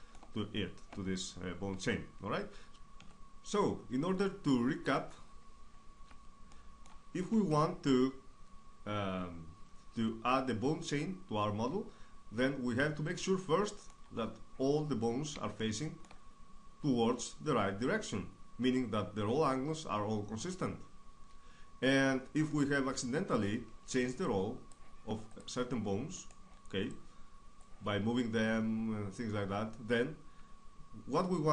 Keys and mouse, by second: 2.9-7.0 middle drag, 9.6 middle click, 12.4 middle click, 15.3-17.8 middle drag, 20.0 right click, 21.7-25.1 drag, 23.6-25.1 right drag, 25.1-27.0 middle drag, 28.9-30.0 middle drag, 30.0 a, 30.3 a.